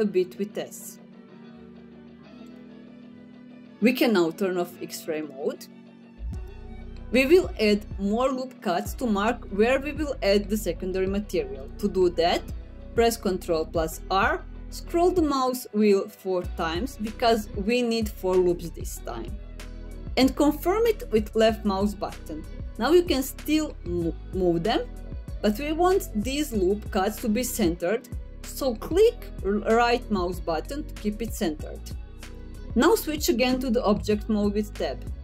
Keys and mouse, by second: 0.3 s, 2.0 click, 9.0 middle click, 12.8 ctrl+r, 30.8-33.3 drag, 34.2 Tab.